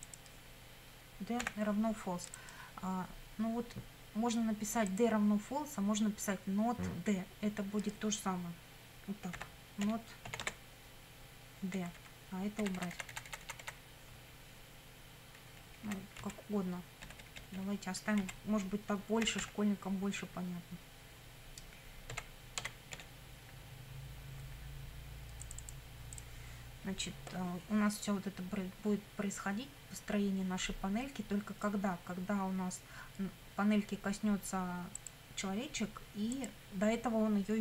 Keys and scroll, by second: 1.4 =, 9.1-10.8 typing, 12.0 Right, 12.6 Delete, 15.7 Left, 16.2 Right, 17.0 BackSpace, 18.2 Right, 19.3 =, 21.9-23.5 typing.